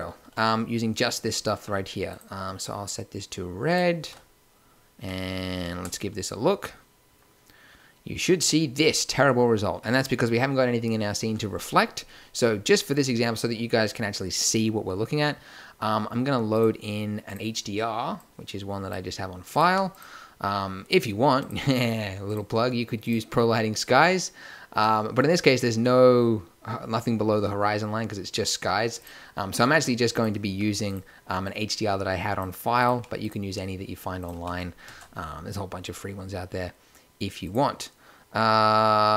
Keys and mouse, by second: 0.1 a, 2.0-3.9 drag, 6.9 shift+z, 14.3-15.9 drag, 16.4-18.8 drag, 19.6 g, 23.2-24.6 drag, 24.8 drag, 29.1-30.5 drag, 30.5 x, 32.9-34.8 drag, 32.9 g, 34.6 x, 34.8 shift+a.